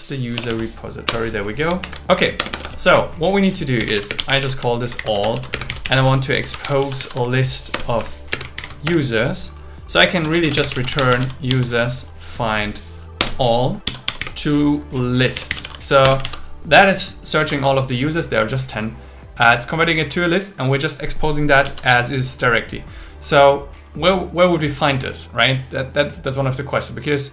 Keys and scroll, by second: 0.4 BackSpace, 1.1 Return, 1.8 super+Right, 2.4 Return, 2.9 Up, 4.1-8.3 typing, 7.8 Return, 8.0 Right, 8.6 alt+8, 8.8 Return, 10.5 space, 13.2 Return, 16.0 Return, 16.2 super+s, 21.6 super+s.